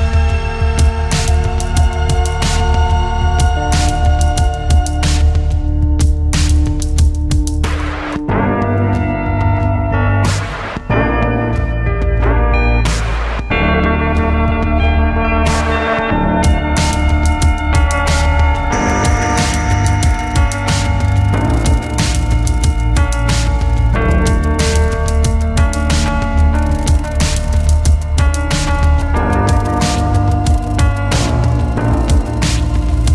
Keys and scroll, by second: 10.3 space.